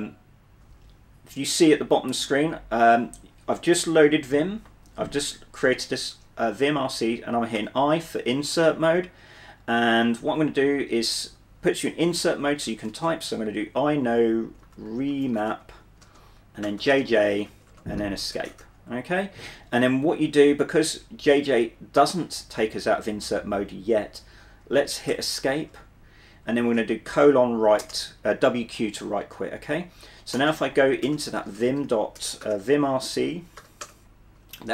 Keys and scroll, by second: 7.7 typing, 12.5-13.7 typing, 14.7-19.1 typing, 25.2 Escape, 26.6-27.9 typing, 30.2-34.2 typing.